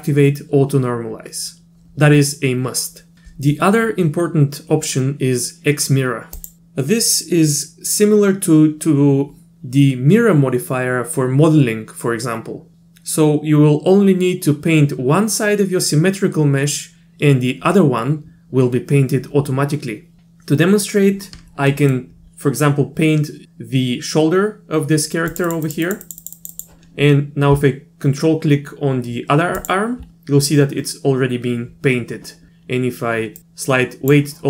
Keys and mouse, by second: 6.4 click, 21.7 middle click, 25.3 click, 25.5 click, 25.7 click, 25.9 click, 26.0 click, 26.2 click, 26.4 click, 26.5 click, 33.4 click.